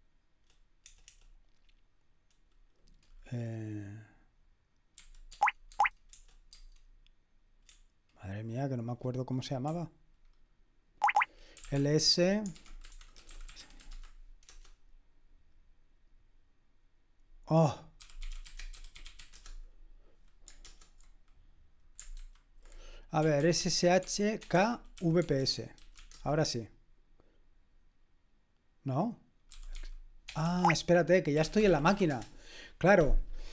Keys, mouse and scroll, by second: 0.9 BackSpace, 5.3 Tab, 5.7 Tab, 6.1 BackSpace, 6.5 Tab, 7.7 BackSpace, 8.4 BackSpace, 9.7-15.3 typing, 17.7-20.1 typing, 20.6 super+Return, 22.3 super+h, 23.0-26.4 typing, 29.3-32.6 typing.